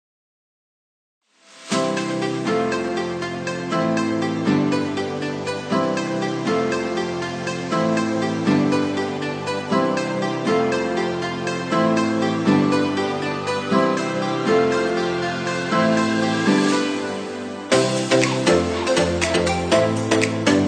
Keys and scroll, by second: 11.7 ctrl+0.